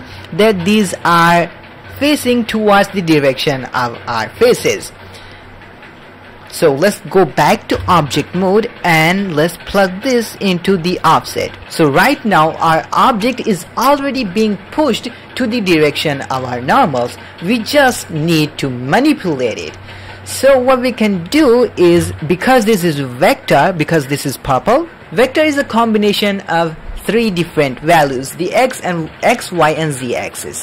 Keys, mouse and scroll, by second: 0.2 ctrl+middle click, 0.6 middle click, 1.3 middle click, 1.9 ctrl+middle click, 7.7 Tab, 8.2 middle click, 9.2 middle click, 9.7-11.1 drag, 20.6 middle click, 20.9 click, 21.9 g, 21.9 alt+a, 22.4 middle click, 22.9-25.0 drag.